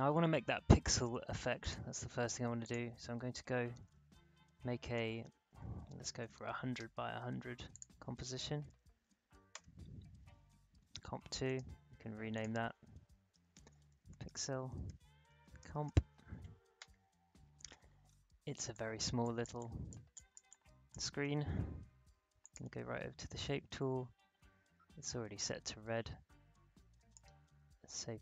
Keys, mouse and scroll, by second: 1.6 click, 3.1-6.3 typing, 7.7 click, 8.0-9.2 typing, 9.5 Return, 11.4 right click, 12.3 click, 13.0-16.3 typing, 18.0-18.5 alt+scroll up 1, 18.5 alt+space, 18.7 click, 19.0 space, 19.2 click, 19.4 space, 20.4 click, 22.4 click, 27.1-28.2 drag.